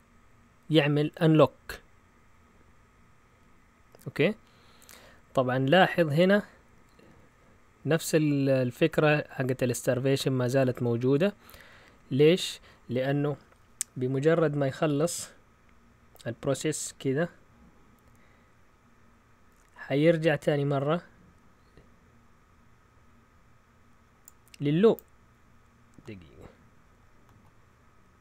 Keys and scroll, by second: 6.7-7.8 typing.